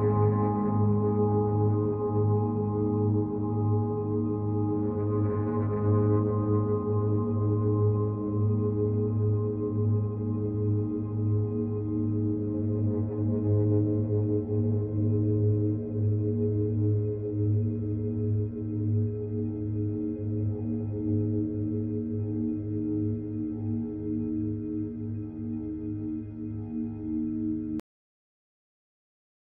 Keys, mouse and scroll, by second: 2.8 click, 5.6 click, 8.8 z, 10.3 click, 21.1 click.